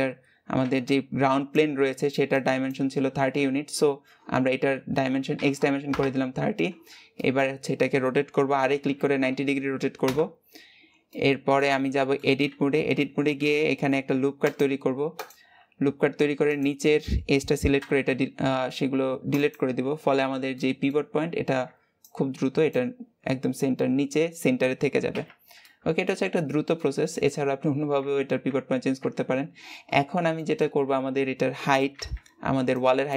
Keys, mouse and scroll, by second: 5.7 click, 7.0-8.2 middle drag, 8.2 r, 10.9-12.3 middle drag, 12.3 Tab, 13.5 ctrl+r, 16.4 click, 19.9 Tab, 20.3-27.2 middle drag, 27.2 Tab, 27.8 Tab, 29.8-30.2 scroll down 2, 30.2 shift+middle click, 30.6-30.9 scroll up 1.